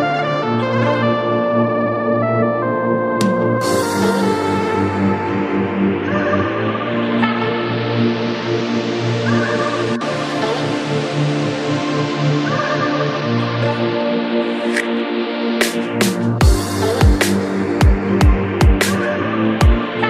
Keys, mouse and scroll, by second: 0.3 click, 1.2-2.5 right drag, 2.5 click, 3.3-4.4 right drag, 4.4 click, 5.3 right click, 6.2 click, 7.1 right click, 7.9-8.6 middle drag, 8.6 click, 9.3-10.6 right drag, 10.6 click, 11.5 right click, 12.2-12.7 scroll down 1, 12.7 KP_1, 13.1-14.0 scroll up 2, 14.0 click, 14.7-16.0 drag, 16.5 g, 19.5 ctrl+s.